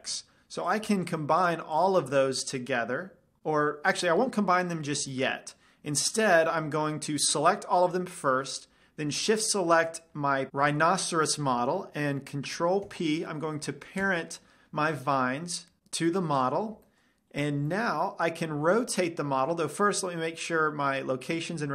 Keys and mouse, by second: 1.2-3.4 drag, 4.3-9.2 middle drag, 9.8-10.5 drag, 13.3 ctrl+p, 16.9-18.6 drag, 17.4-18.8 middle drag, 19.0 r, 20.1-21.7 right drag.